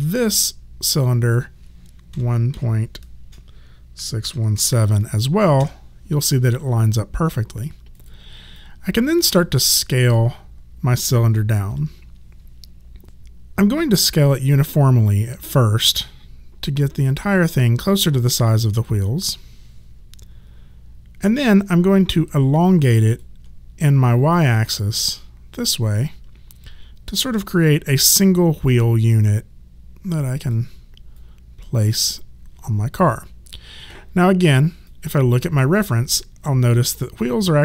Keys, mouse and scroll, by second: 2.1 KP_1, 2.5 KP_Decimal, 4.0 KP_6, 4.2 KP_1, 4.6 KP_7, 5.7 Return, 5.7 KP_Enter, 7.2 click, 8.6 alt+click, 11.7 r, 13.0 ctrl+z, 14.7 click, 22.5 alt+click, 26.0 alt+click, 27.8 w, 29.1 click, 31.1 click, 34.9 click.